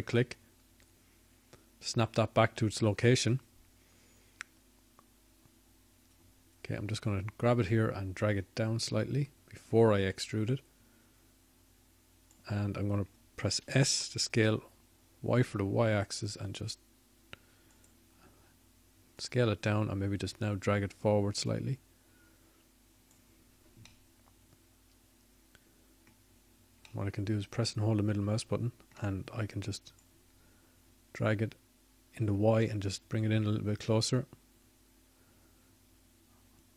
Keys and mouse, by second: 1.2 ctrl+z, 4.5 shift+d, 19.6 s, 23.9-28.1 drag.